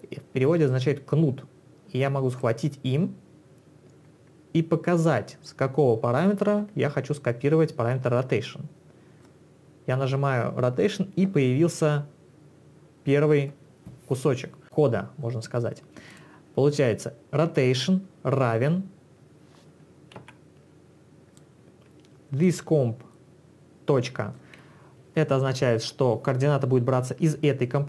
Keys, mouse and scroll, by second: 2.5 click, 15.3 click, 16.1 click, 20.2 ctrl+1, 21.4 ctrl+1, 21.4 click, 22.5 ctrl+click.